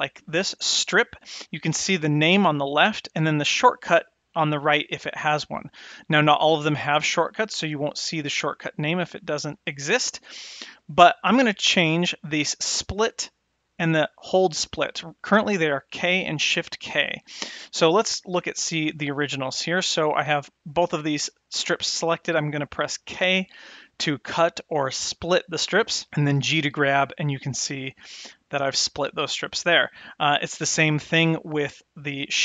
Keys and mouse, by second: 0.7-17.5 drag, 18.9 click, 20.5-20.9 drag, 23.2 k, 26.3 g, 31.2 click.